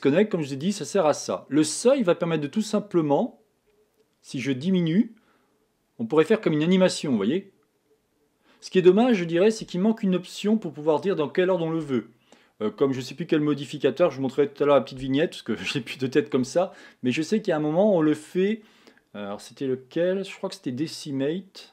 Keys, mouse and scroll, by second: 0.2 click, 2.4 click.